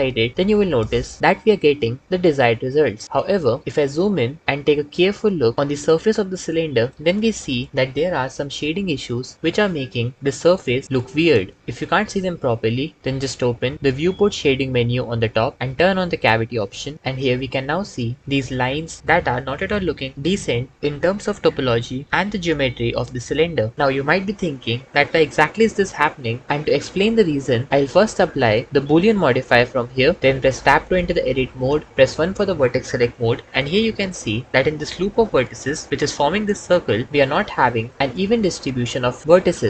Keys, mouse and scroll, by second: 13.7-22.3 drag, 28.6-30.1 drag, 31.5 Tab, 31.9 1.